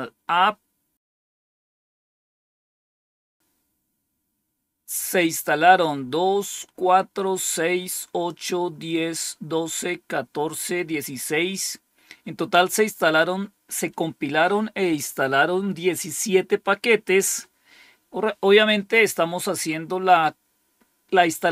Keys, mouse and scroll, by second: 0.7 scroll down 2, 11.0 scroll down 2.